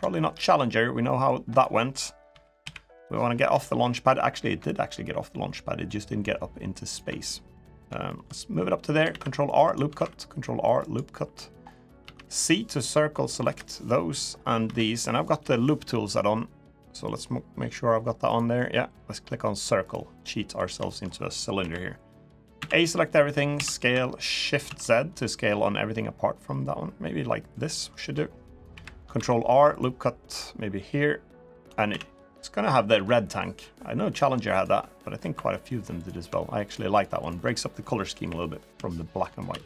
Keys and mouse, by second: 0.8 middle click, 1.3 click, 2.0 KP_3, 2.4 KP_1, 3.4 shift+middle click, 4.4-6.7 ctrl+drag, 7.3 middle click, 7.8 shift+middle click, 8.8 ctrl+r, 11.0 ctrl+r, 11.0 3, 11.8 c, 13.6 middle click, 14.4 c, 18.0 click, 19.6 click, 20.0 middle click, 20.6 shift+middle click, 21.3 KP_1, 22.3 a, 23.3 s, 27.5 middle click, 28.5 KP_1, 28.9 ctrl+r, 31.6 a, 32.7 g, 34.7 middle click, 35.1 3, 36.4 shift+click, 36.7 shift+click, 36.9 shift+click, 38.0 KP_1, 39.2 s.